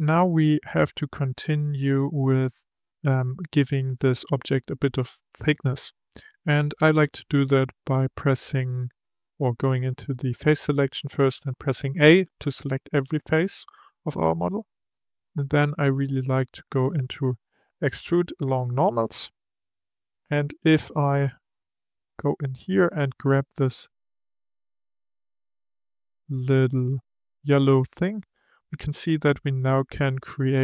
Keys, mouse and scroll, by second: 0.7-3.7 middle drag, 9.1-11.3 drag, 11.3 a, 14.9-18.0 drag, 21.3-24.5 middle drag, 25.3 click.